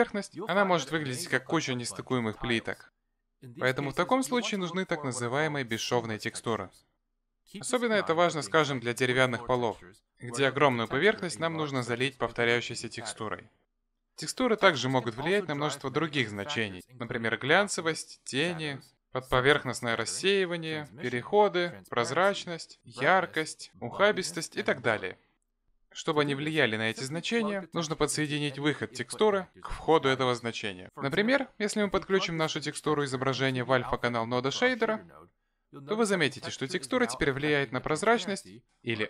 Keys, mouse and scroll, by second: 1.1 Tab, 2.8 s, 10.6 ctrl+z, 12.5 s, 16.9 Tab, 18.9 middle click, 27.5-28.9 scroll down 5, 28.9 scroll down 1, 28.9 middle click, 30.6 click.